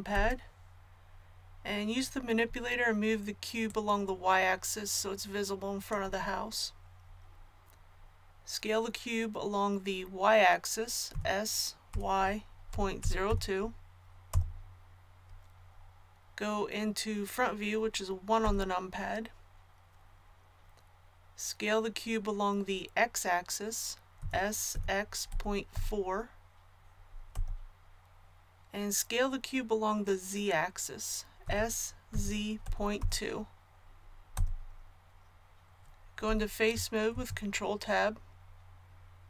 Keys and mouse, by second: 0.1 KP_3, 3.6-11.1 drag, 11.1 s, 18.4 KP_1, 24.1 s, 31.4 s, 37.1 ctrl+Tab.